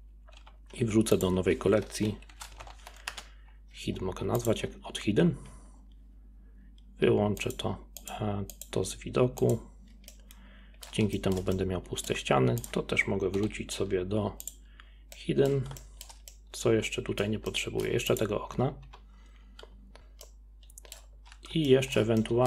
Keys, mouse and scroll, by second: 0.4 m, 5.5 scroll down 4, 7.4 click, 8.0 click, 8.6 click, 9.4 click, 10.1-12.6 middle drag, 12.6 click, 13.4 m, 15.1-18.1 middle drag, 18.1 click, 18.6 scroll up 2, 18.9-19.4 typing, 19.6 drag, 19.8 middle click, 20.2-22.4 middle drag.